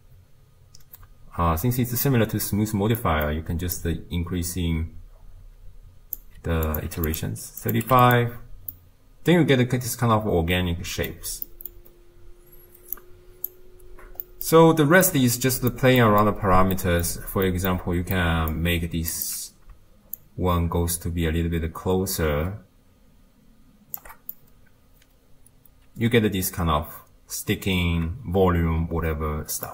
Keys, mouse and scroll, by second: 4.1-7.2 drag, 8.1 click, 8.7-19.2 middle drag, 19.2-23.4 drag, 24.4-27.4 middle drag.